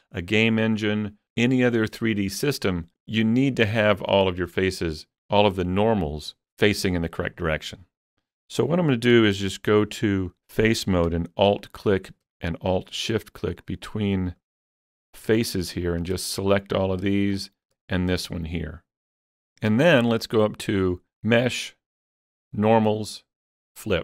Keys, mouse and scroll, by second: 7.8-11.5 middle drag, 9.1 3, 11.6 alt+click, 13.5 alt+shift+click, 14.2 alt+shift+click, 14.9 middle click, 15.7 alt+shift+click, 16.3 shift+middle click, 17.4 alt+shift+click, 18.1 shift+middle click, 20.8 shift+click.